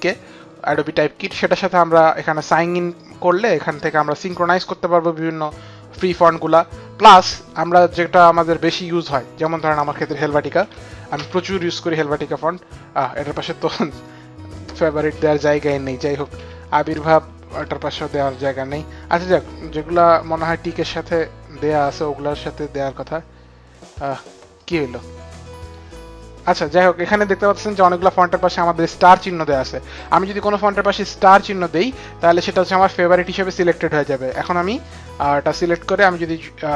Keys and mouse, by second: 1.2 click, 4.1 click, 10.0-11.3 typing, 14.2 click, 15.6-16.5 typing, 23.5 click, 24.2 click, 25.3 click, 34.5 click.